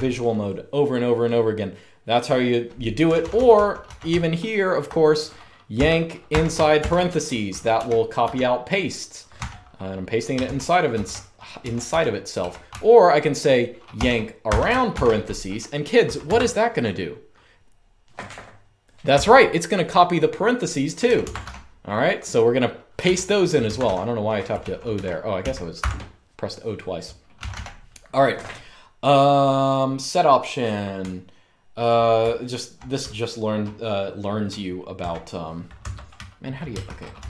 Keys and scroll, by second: 2.5-13.1 typing, 14.2 typing, 15.5-16.2 typing, 18.8 typing, 20.7-21.1 typing, 21.0 Escape, 22.7-25.6 typing, 23.4 Escape, 26.8-28.9 typing, 30.7-34.7 typing, 35.6 Escape, 36.2 Escape, 36.3-37.2 typing.